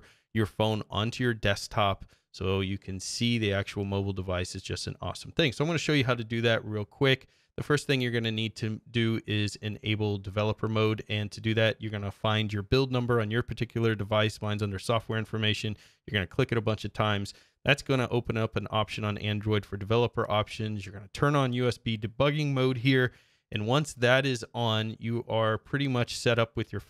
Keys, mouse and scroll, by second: 1.3-2.4 scroll down 6, 5.1 scroll down 1, 5.7-6.0 scroll up 1, 6.3-6.6 scroll up 2, 6.8-7.2 scroll up 2, 7.4-9.9 drag.